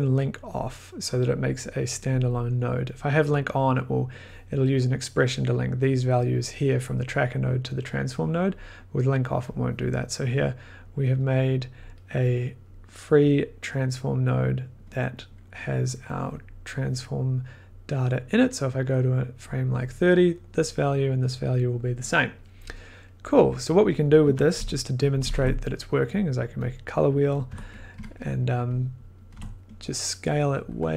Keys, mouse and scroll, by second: 0.5-5.0 drag, 9.5 click, 10.3 click, 10.5 click, 10.8 click, 11.7 click, 11.8-12.2 scroll, 13.2 click, 15.9 click, 16.0 click, 16.1 click, 19.4 click, 22.3 click, 23.4 click, 23.9 click, 24.2 Tab, 24.5 Tab, 24.7-25.8 typing, 26.1 click, 26.7 click, 27.5-27.9 typing, 29.1-29.8 typing, 29.2 scroll, 30.8 click.